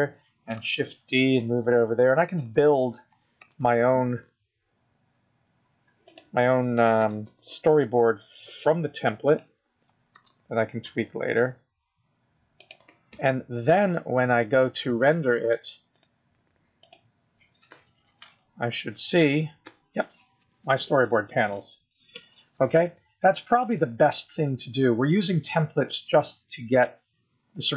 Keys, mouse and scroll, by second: 0.5 shift+d, 3.3 shift+d, 5.9 shift+d, 9.5 shift+d, 12.6 shift+d, 18.4 click.